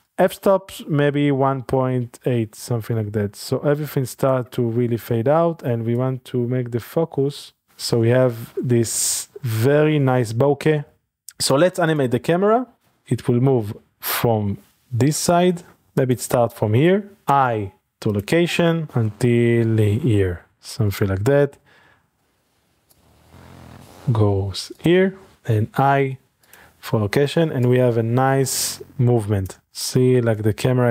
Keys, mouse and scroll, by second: 0.7-5.4 shift+drag, 6.0-7.7 drag, 7.7 scroll down 1, 7.8 middle click, 8.6 shift+middle click, 8.8 scroll up 1, 9.3 ctrl+shift+middle drag, 10.0 shift+middle click, 10.9 shift+click, 11.4-12.8 drag, 13.0-15.4 middle drag, 15.4 typing, 16.0 click, 17.2 i, 18.1 click, 20.9 click, 22.9-23.8 drag, 24.8 click, 25.3 i, 26.6 click, 27.6-29.7 drag, 29.6 space.